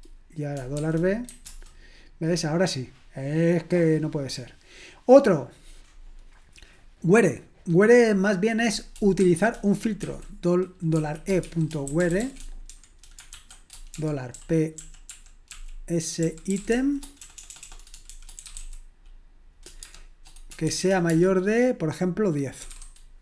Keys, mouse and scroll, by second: 0.8-1.3 typing, 1.4 Return, 9.2-10.0 typing, 11.2-13.9 typing, 15.1-21.2 typing.